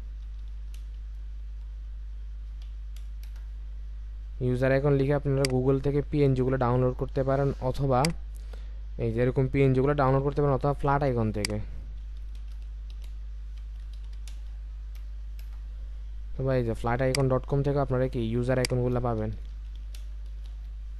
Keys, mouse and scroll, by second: 0.0-1.5 typing, 2.6 typing, 3.2 Return, 12.2-15.0 typing, 15.4 Return, 19.3-20.5 typing.